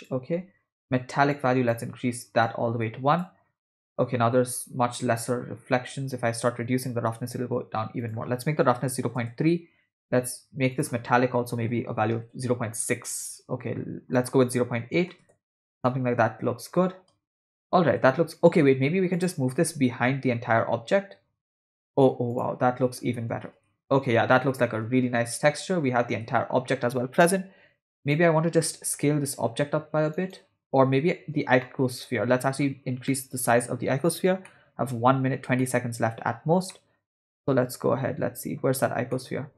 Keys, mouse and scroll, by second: 1.3 click, 2.4 click, 5.9-7.5 drag, 8.0-9.3 drag, 10.7-12.4 drag, 14.1-15.4 drag, 17.2 space, 18.0 space, 19.1 click, 19.5 g, 23.4-26.1 typing, 27.2 space, 28.0 click, 28.7 s, 30.7 space, 30.9 space, 31.6-32.7 middle drag, 33.1 middle click, 34.5 middle click, 35.4 scroll down 1, 35.6 middle click, 36.7-38.6 middle drag, 39.1 middle click.